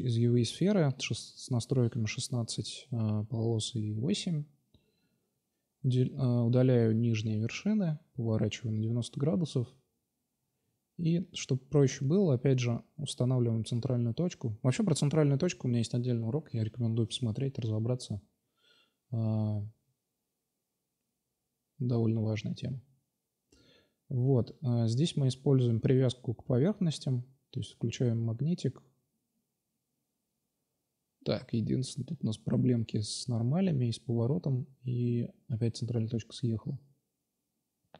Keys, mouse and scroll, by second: 0.1 click, 4.1 middle click, 4.8-7.4 typing, 9.1 s, 9.9 g, 11.6 ctrl+z, 14.0 s, 15.3 click, 15.4 ctrl+c, 15.8 space, 16.5 Tab, 19.5 drag, 19.8-20.7 drag, 21.0 g, 22.1 g, 24.2 g, 27.9 Tab, 29.1 a, 30.4 a, 30.4 s, 32.5 a, 32.6 a, 33.2 ctrl+n, 33.6 Tab, 34.4 Tab, 35.4-37.1 drag.